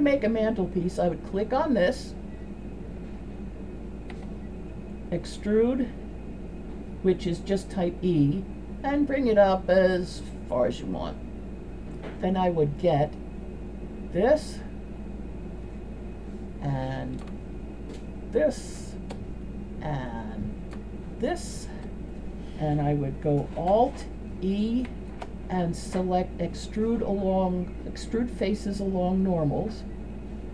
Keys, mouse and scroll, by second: 4.2 e, 13.7 right click, 18.8-19.2 shift+middle drag, 19.5-20.2 middle drag, 21.2 shift+middle click, 22.2-22.6 middle drag, 24.9 alt+e.